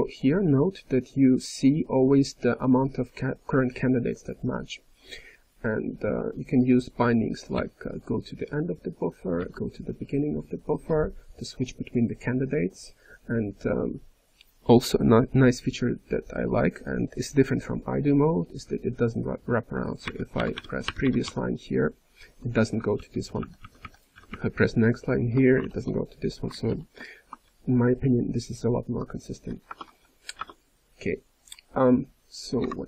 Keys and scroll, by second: 6.3-7.0 typing, 7.5 alt+>, 9.3 alt+<, 20.1 ctrl+p, 20.3 ctrl+p, 22.5-23.3 typing, 23.4 ctrl+n, 25.6 alt+<, 26.6 alt+>, 27.4 ctrl+p, 27.9 ctrl+p, 28.0 ctrl+p, 29.6 alt+BackSpace.